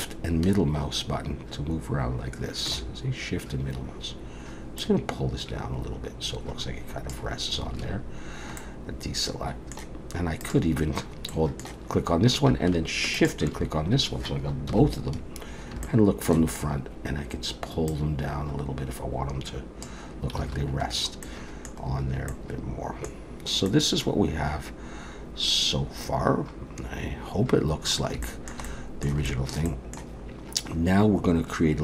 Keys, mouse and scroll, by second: 0.0 shift+middle click, 4.8 click, 7.7 alt+a, 8.6 middle click, 10.4 click, 11.3 middle click, 13.2 shift+click, 14.7 KP_1, 15.4-15.8 scroll up 3, 15.8 shift+middle click, 17.9 click, 20.5 alt+a, 20.9-21.9 scroll down 3, 21.3 middle click, 21.9-22.8 scroll down 2, 22.3 middle click, 23.2-24.3 scroll down 2, 23.7 middle click, 28.2 shift+middle click, 29.3 shift+middle click, 29.7 middle click.